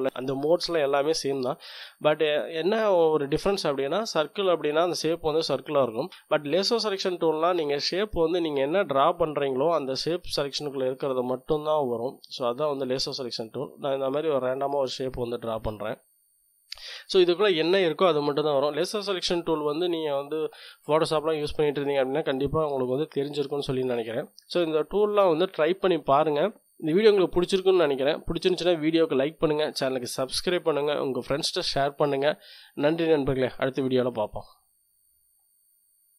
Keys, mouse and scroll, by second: 1.3 click, 2.0-3.3 middle drag, 6.8-7.1 scroll down 1, 7.1-8.4 drag, 8.7-17.1 drag, 17.1 middle click, 17.4-18.6 drag.